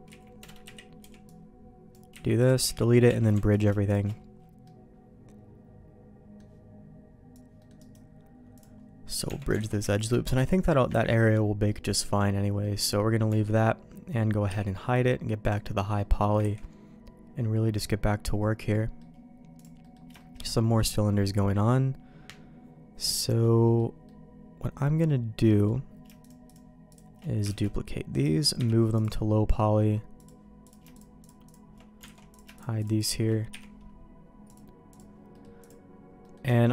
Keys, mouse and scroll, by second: 0.0 z, 0.6 KP_3, 1.0 b, 2.1 x, 2.6 z, 3.0 Tab, 4.6-6.3 middle drag, 7.5 middle click, 7.7 right click, 9.2 Tab, 9.6 alt+a, 9.9 alt+click, 10.2 alt+shift+click, 10.9 ctrl+x, 11.6 middle click, 12.6 middle click, 13.2 Tab, 14.4 h, 15.4 click, 15.7 middle click, 16.1 middle click, 16.4 ctrl+s, 16.6-18.9 middle drag, 19.5 click, 19.8 middle click, 20.1 shift+middle click, 23.4 middle click, 24.0-25.6 middle drag, 26.4 shift+click, 27.4 shift+d, 28.5 m, 30.1 click, 30.6 click, 30.9 shift+click, 32.0 alt+a, 32.3 click, 32.5 shift+click, 33.5 h, 34.4 click, 34.9 click, 35.3 middle click, 35.6 click, 36.2 middle click, 36.5 shift+middle click.